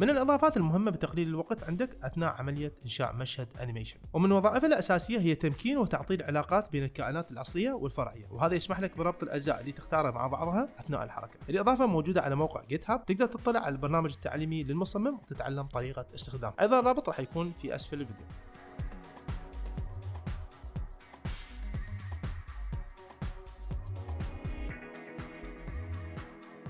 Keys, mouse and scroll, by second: 4.9 space, 5.4-10.8 drag, 11.0 shift+middle click, 11.8-14.8 drag, 18.5 shift+middle drag, 20.0-23.2 drag, 23.3 shift+middle click, 23.7-26.6 drag.